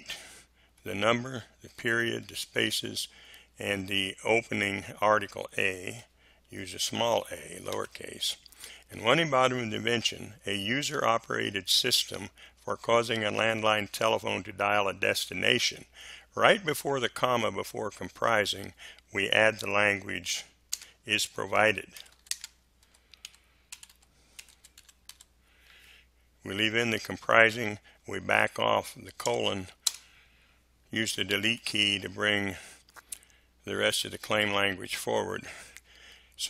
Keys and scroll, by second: 0.7 Delete, 5.9 Delete, 7.7 a, 20.7-25.6 typing, 29.2 BackSpace, 29.8 space, 31.5 Delete, 34.4 Delete.